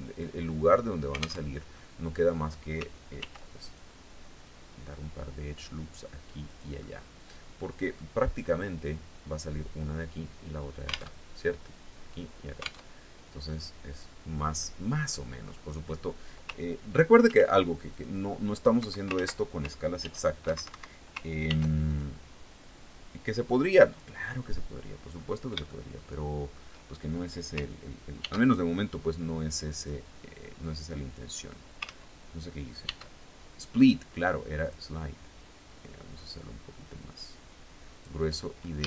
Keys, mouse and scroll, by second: 1.0 alt+Tab, 1.3 alt+middle click, 2.7 ctrl+r, 3.2 ctrl+click, 6.0 click, 6.3-7.7 drag, 7.9 scroll down 1, 10.6 alt+Tab, 12.4 alt+Tab, 14.1 click, 14.9-15.3 scroll up 2, 16.8 ctrl+r, 17.5 click, 18.3 Escape, 18.7 ctrl+z, 19.5 ctrl+f, 20.1 Escape, 21.0 ctrl+r, 21.4 ctrl+click, 23.4 click, 24.7 scroll up 2, 25.2-26.2 shift+drag, 27.7 ctrl+e, 29.3 click, 31.4 ctrl+z, 32.4 ctrl+e, 34.1 click, 37.5 click, 38.3 a.